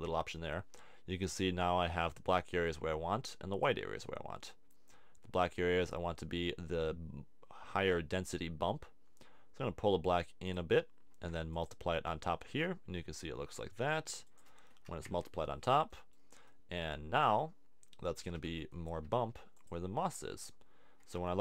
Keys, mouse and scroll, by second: 2.6 click.